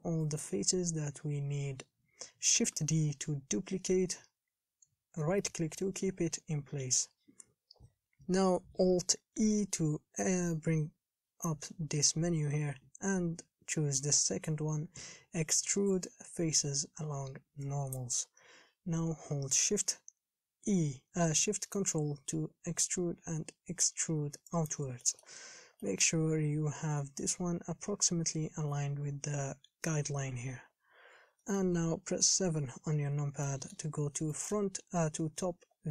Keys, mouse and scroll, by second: 1.6 KP_1, 2.9 shift+d, 25.3 shift+middle click, 25.6-26.1 scroll up 5, 26.1-30.9 shift+middle drag, 30.9-31.6 scroll down 4, 31.6 shift+middle click, 32.6 KP_7, 33.7 shift+middle click, 34.2-34.6 scroll up 1, 34.6-35.9 shift+middle drag.